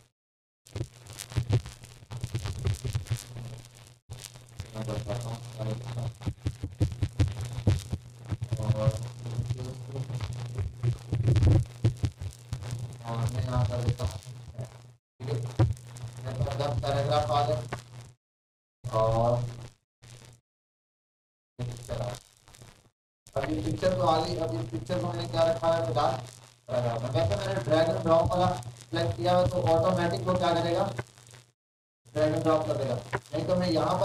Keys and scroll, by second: 1.1 ctrl+a, 2.5 Right, 2.7 Right, 3.1 Left, 6.0-8.3 ctrl+shift+., 8.3 BackSpace, 8.5 BackSpace, 8.7 BackSpace, 10.6 r.